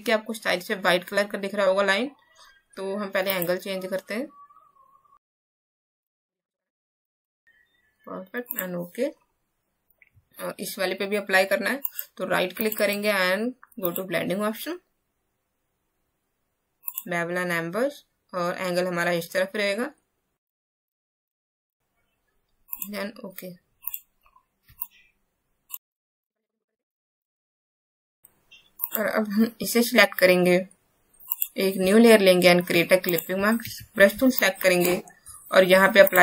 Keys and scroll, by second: 24.6 space, 26.7 ctrl+shift+g, 33.6 alt+b.